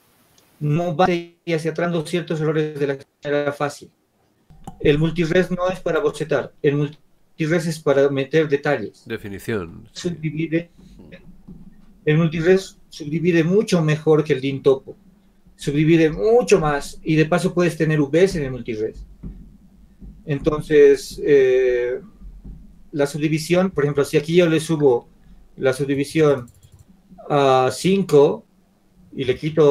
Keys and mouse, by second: 26.1 click, 29.4 shift+z.